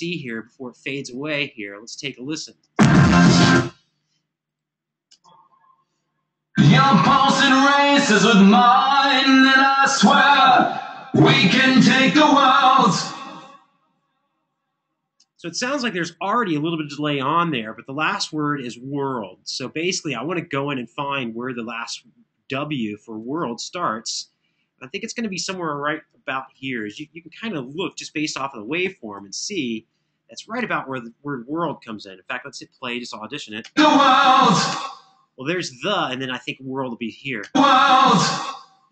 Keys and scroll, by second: 2.3 space, 3.2 space, 4.9 space, 14.9 space, 26.0 super+[, 26.2 super+[, 27.7 super+], 28.2 super+], 33.4 space, 34.5 space, 37.1 space, 38.1 space.